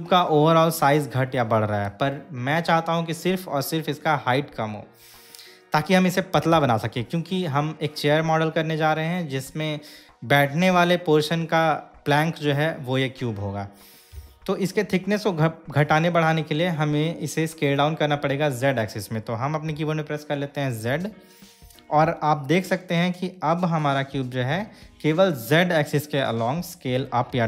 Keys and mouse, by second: 21.1 z.